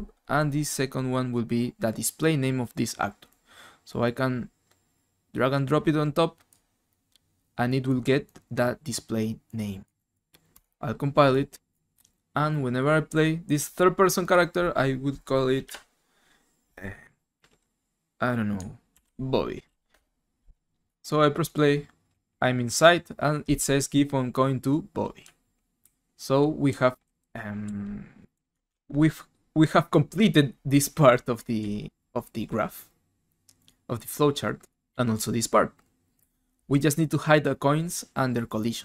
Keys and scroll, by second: 15.6 F2, 18.7-20.2 typing, 22.1 w, 25.0-28.9 typing.